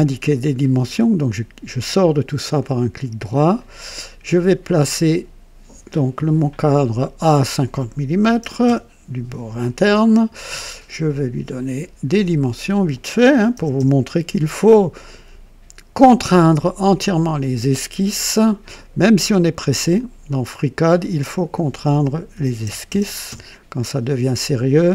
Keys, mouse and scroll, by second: 0.6 right click, 3.5 click, 6.5 click, 8.1 KP_5, 8.2 KP_5, 8.4 KP_0, 8.6 Return, 8.6 Return, 11.5 click, 12.6 click, 13.3 KP_5, 13.5 KP_0, 13.8 Return, 15.9 click, 17.0 click, 19.9 click, 21.3 click, 22.5 KP_1, 22.6 KP_0, 23.0 KP_0, 23.3 Return.